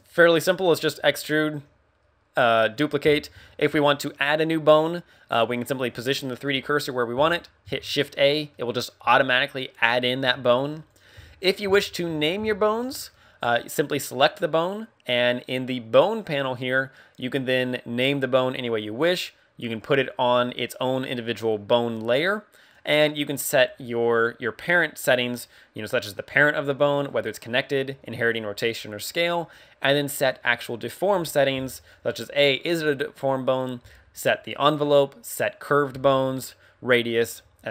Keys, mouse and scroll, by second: 6.0 click, 7.6 shift+a, 8.4 middle click, 9.5 middle click, 10.2 KP_1, 10.8 right click, 11.0 x, 11.7 shift+middle click, 14.1 right click.